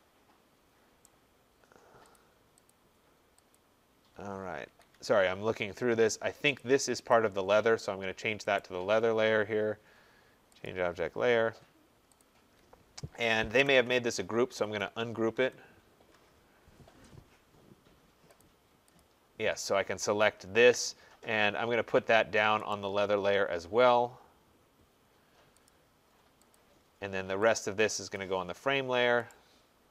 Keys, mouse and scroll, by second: 1.0 right click, 1.4-2.1 scroll, 2.2 click, 2.7 click, 3.5 click, 3.5-4.1 scroll, 4.4 scroll down 2, 4.7 Escape, 4.9 Escape, 5.3 middle click, 6.6 middle click, 6.6 click, 7.1 click, 8.6 right click, 10.7 click, 11.3 middle click, 11.3 middle click, 12.2 click, 13.6-16.1 typing, 18.4 click, 19.0 click, 19.7 middle click, 19.8 middle click, 19.9 middle click, 22.7 right click, 25.7 click, 26.6 click, 26.9 middle click, 28.2 click, 29.3 right click.